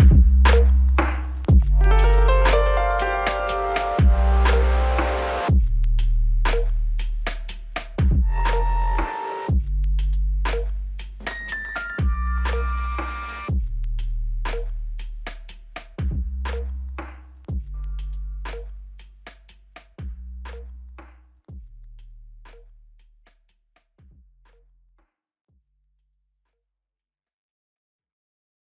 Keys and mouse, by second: 4.9 double click, 5.5 shift+click, 8.1 shift+click, 11.4 double click, 12.2 shift+click, 15.5 double click, 17.2 shift+click, 22.8 alt+click.